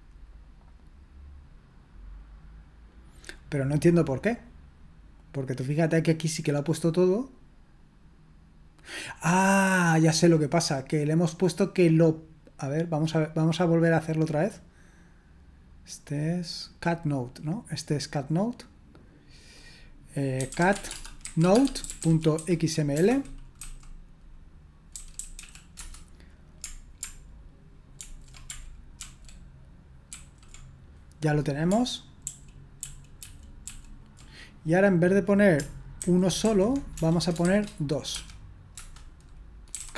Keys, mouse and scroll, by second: 3.1-20.9 drag, 20.1-23.6 typing, 24.7-25.8 typing, 28.0 ctrl+alt+v, 29.0 ctrl+d, 30.1 ctrl+d, 32.2 ctrl+p, 32.8 ctrl+p, 33.2 ctrl+p, 33.7 ctrl+p, 36.0 alt+b, 36.5 alt+b, 37.0-38.2 typing, 38.7 Return, 39.5-39.9 typing.